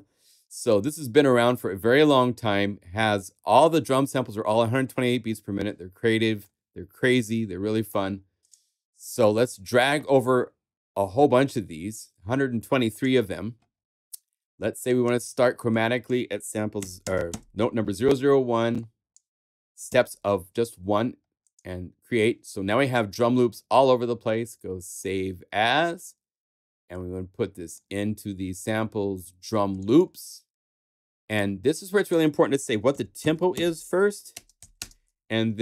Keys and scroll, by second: 16.8 0, 17.3 |, 19.8 |, 32.6-34.3 typing.